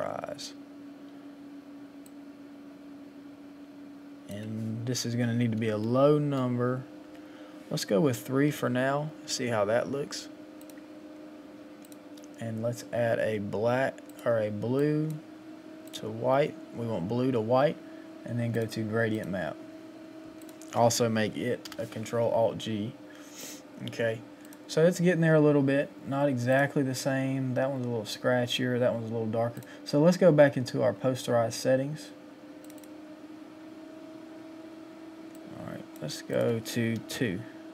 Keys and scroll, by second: 5.7 Up, 37.0 Down.